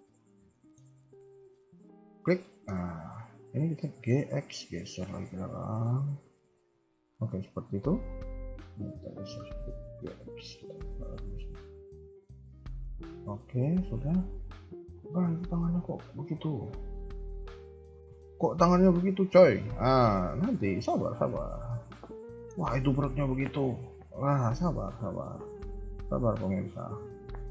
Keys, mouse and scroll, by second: 0.2 scroll down 2, 0.5 shift+middle click, 0.8-1.5 scroll up 2, 1.9 alt+click, 2.4 shift+middle click, 3.8 g, 6.3-6.6 scroll down 3, 6.9 KP_3, 7.2 KP_1, 7.7-8.0 scroll up 2, 8.5 alt+click, 9.8 g, 12.8-13.4 scroll down 4, 13.3 KP_3, 13.4 KP_1, 13.8 scroll up 2, 18.5 click, 19.6 click, 20.8 Tab, 21.5 scroll down 1, 21.7 middle click, 22.5 KP_3, 22.7 KP_1, 24.0 click, 26.4 Tab, 26.4 click, 27.3 middle click.